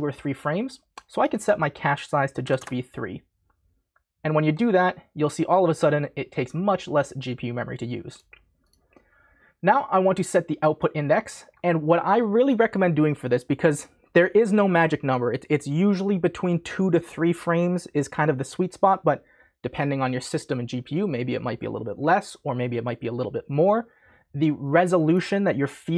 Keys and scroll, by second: 2.4 3, 2.5 Return.